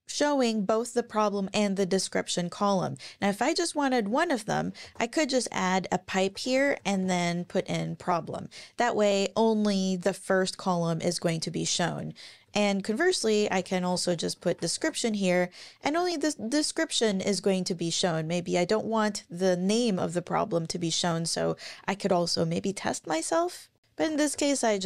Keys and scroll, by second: 2.3 Up, 3.2 Left, 4.8 shift+\, 6.1-7.0 typing, 7.6 Up, 12.4 Down, 12.8 super+Right, 13.2 Left, 15.8 Up, 23.7 super+z, 24.0 BackSpace, 24.3 BackSpace.